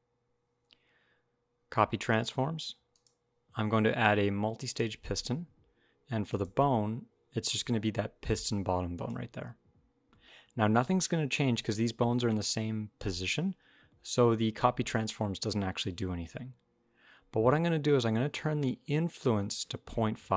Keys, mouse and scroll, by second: 2.7 click, 6.0 click, 18.9 click.